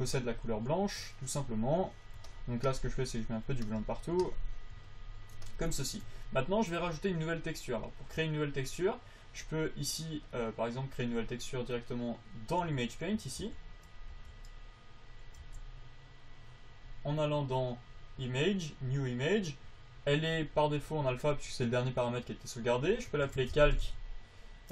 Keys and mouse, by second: 0.9 f, 7.1 click, 13.0 t, 13.5 t, 13.7 n, 14.5 n, 15.3 click, 15.7 n.